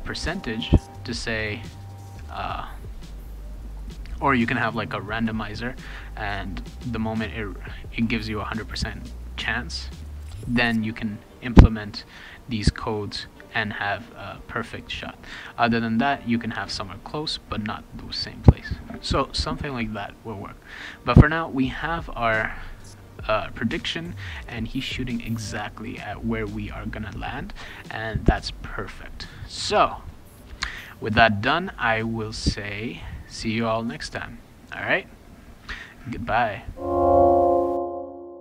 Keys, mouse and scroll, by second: 5.2-6.4 drag, 10.9 click, 11.1 click, 11.3 click, 12.1 click, 12.3 click, 12.8 click, 13.0 click, 13.1 click, 14.0 click, 14.2 click, 14.4 click, 18.4 click, 23.4 click.